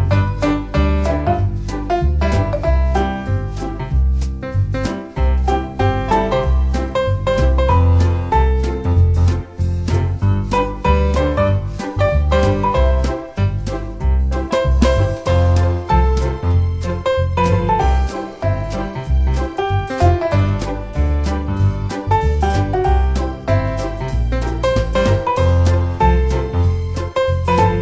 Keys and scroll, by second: 3.1 super+c, 4.6 super+v, 11.9 super+c, 12.1 super+v, 20.3 Down, 20.6 Down, 20.9 Left, 21.2 Left, 21.5 Left, 24.7 Up.